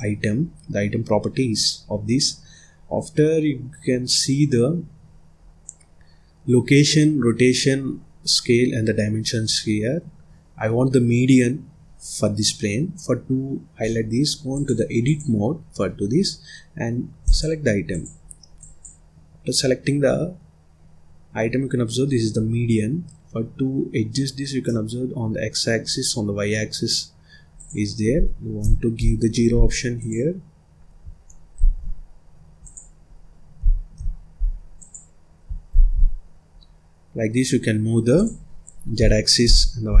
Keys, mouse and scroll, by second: 14.4-17.3 drag, 17.8 click, 18.5-21.5 drag, 24.5-27.4 middle drag, 27.4-30.0 drag, 31.4 ctrl+z, 32.5-34.8 drag, 35.6 ctrl+z, 38.0-40.0 drag.